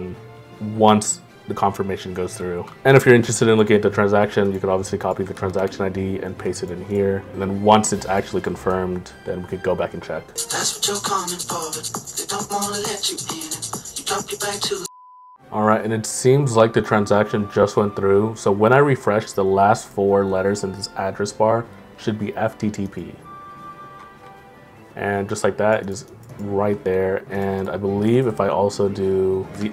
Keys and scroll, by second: 6.6 ctrl+m, 25.6 ctrl+m.